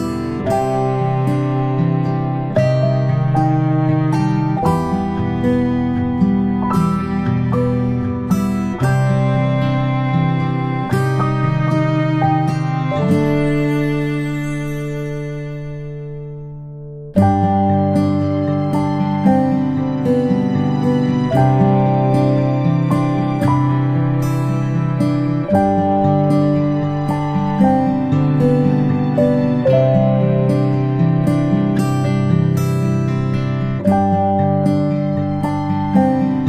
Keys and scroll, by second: 4.1 ctrl+z, 4.4 space, 8.9 ctrl+z, 9.1 ctrl+z, 19.4 ctrl+space, 20.4 p, 27.2 ctrl+space, 27.5 ctrl+space, 27.9 i, 30.7 ctrl+z, 35.6 ctrl+[, 36.3 ctrl+shift+].